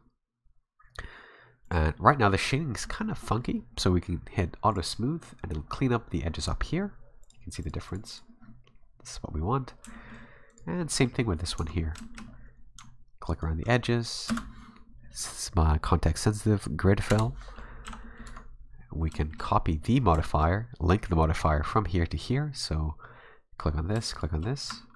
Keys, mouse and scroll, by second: 1.6 click, 2.0 middle click, 2.8 middle click, 3.2 middle click, 4.7 click, 5.2 scroll down 2, 5.4 middle click, 5.7-6.2 scroll up 2, 7.2 click, 7.6 click, 7.9 click, 8.1 click, 9.9 shift+middle click, 10.5 right click, 10.8 middle click, 11.3 middle click, 11.6 Tab, 11.8-12.5 scroll up 5, 12.0 shift+middle click, 13.3 alt+right click, 14.3 space, 17.4-18.0 scroll down 4, 17.9 a, 18.0 middle click, 18.3 Tab, 18.6 scroll down 2, 19.2 shift+middle click, 20.2 middle click, 24.1 shift+right click.